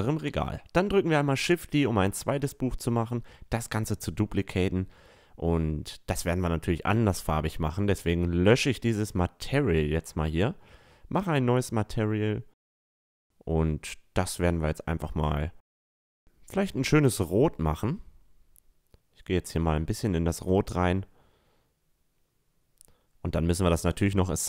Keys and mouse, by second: 0.2 shift+d, 6.5-8.5 drag, 9.3-14.0 drag, 13.6 o, 16.6-18.7 drag, 19.7-21.4 drag, 21.4-24.4 middle drag, 21.8 Tab, 22.4 a, 23.3 a.